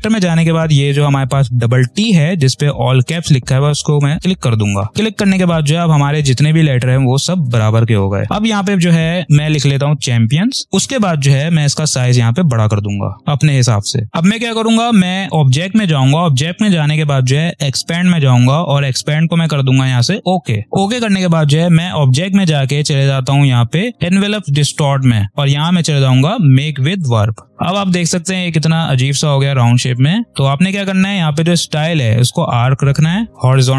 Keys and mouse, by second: 3.4 click, 7.5 ctrl+a, 9.3-10.1 typing, 10.6-15.2 drag, 17.6 click, 20.1 click, 26.9 click.